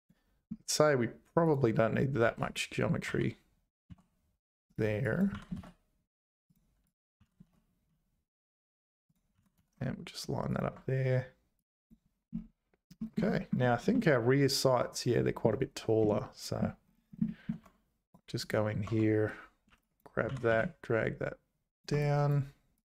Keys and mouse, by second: 1.5 click, 2.3 1, 2.5 click, 3.1 g, 5.0 click, 5.3 g, 6.9 click, 7.2 g, 9.3 g, 11.6 click, 13.1 shift+click, 13.9 shift+click, 15.1 shift+click, 16.2 shift+middle click, 17.2 shift+click, 17.6 Tab, 18.4 click, 18.9 Tab, 19.7 1, 19.9 click, 20.2 g, 22.7 click.